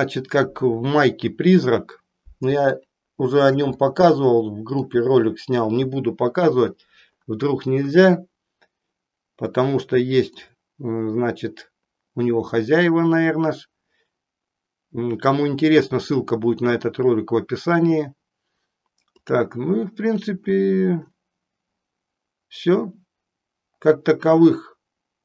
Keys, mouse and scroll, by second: 2.7 shift+middle click, 3.8 middle click, 9.4 middle click, 19.1 click.